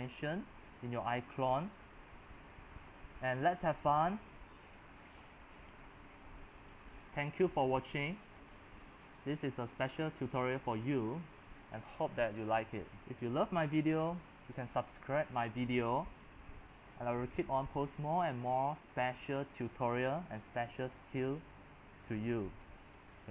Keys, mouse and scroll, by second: 0.8 middle click, 0.8-1.5 scroll, 1.3-7.4 typing, 5.1 click, 5.4 middle click, 5.4 scroll, 6.0 scroll, 7.9-8.9 drag, 8.7-10.6 typing, 11.5-16.2 drag, 16.2 typing, 17.6 x, 18.5-23.3 drag.